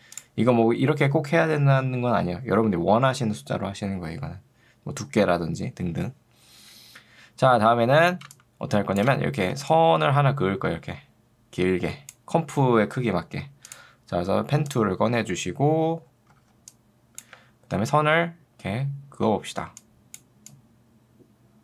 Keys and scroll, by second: 8.3 space, 9.5 ctrl+2, 12.9 Escape, 16.5 ctrl+2, 17.5 Escape.